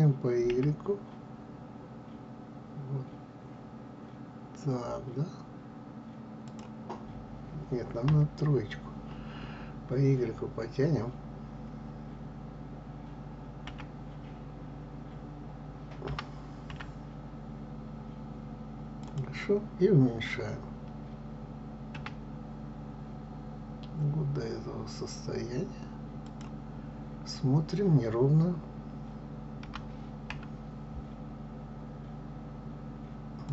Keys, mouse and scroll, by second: 7.4 KP_3, 13.0 y, 15.6 g, 21.5 s, 26.2-28.9 scroll up 2, 29.2 scroll up 1, 29.2 g.